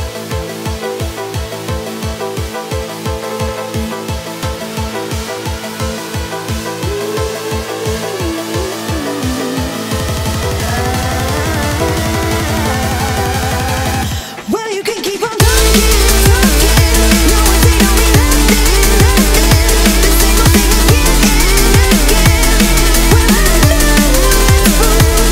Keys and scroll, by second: 4.5 ctrl+z, 20.9 ctrl+i.